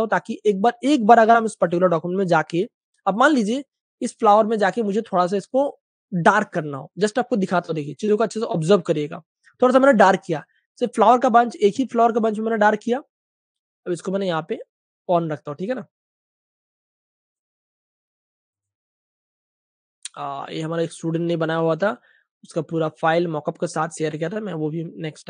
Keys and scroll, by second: 2.2-3.6 typing.